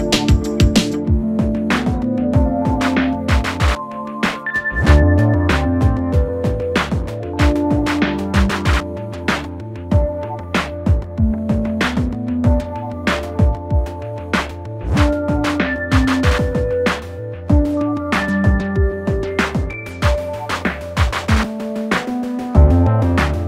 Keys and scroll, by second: 1.3 2, 1.5 ], 3.8 F9, 4.2 ], 8.1 4, 20.6 3, 23.1 ].